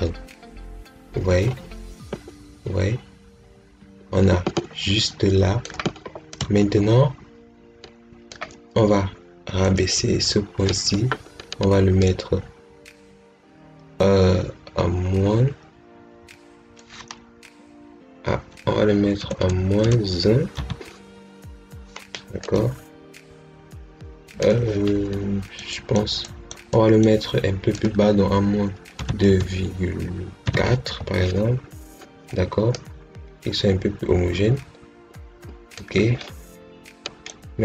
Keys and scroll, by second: 19.1 BackSpace, 20.4 1, 28.8 2, 29.1 ., 31.4 4.